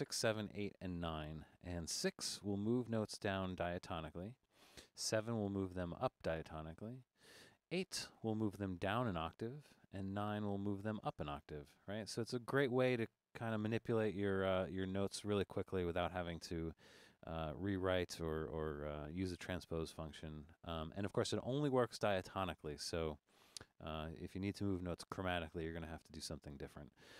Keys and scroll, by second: 2.5-6.0 typing, 7.1 7, 8.2 typing, 10.0 9, 11.7 8, 13.1-13.8 typing.